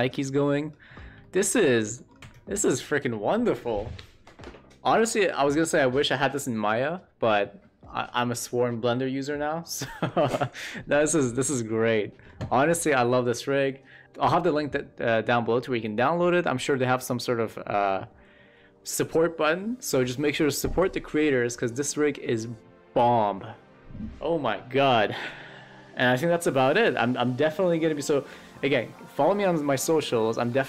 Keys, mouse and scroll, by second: 0.4 middle click, 1.1 shift+middle drag, 1.8 middle click, 11.3-12.2 middle drag, 12.5 middle click.